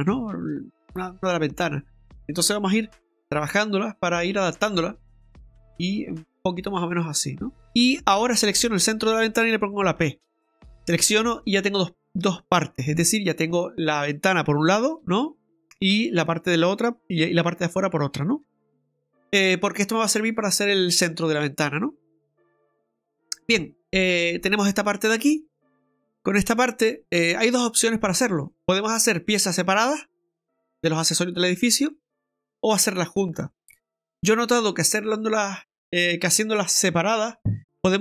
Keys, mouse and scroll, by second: 7.7 click, 7.7 right click, 10.0 p, 12.9 Tab, 13.4 right click, 15.0 g, 17.4 right click, 18.4 right click, 18.4 ctrl+z, 21.6-21.9 scroll up 2, 22.2-22.5 scroll down 2, 22.5 middle click.